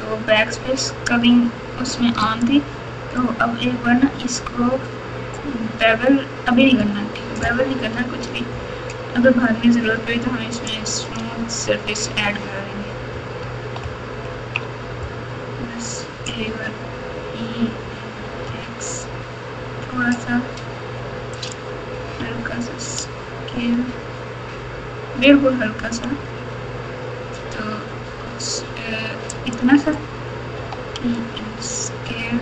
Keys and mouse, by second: 2.2 alt+click, 10.6 alt+click, 13.8 ctrl+KP_2, 14.3 ctrl+KP_2, 16.4 e, 22.1 s, 30.5 e.